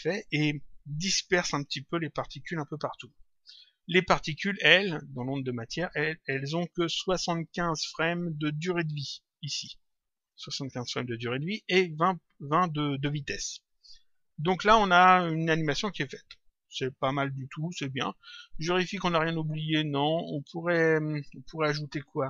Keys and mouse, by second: 3.7 click, 5.2 click, 7.5 click, 10.2 click, 14.8 click.